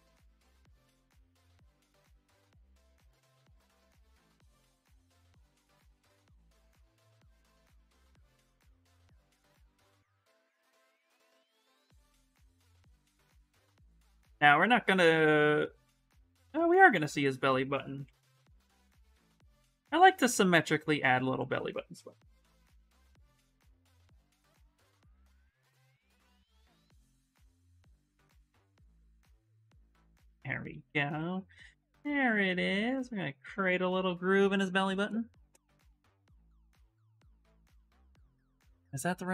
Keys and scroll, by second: 2.0 ctrl+z, 17.8 x, 19.3 ctrl+z, 21.7-22.7 typing, 30.5 s.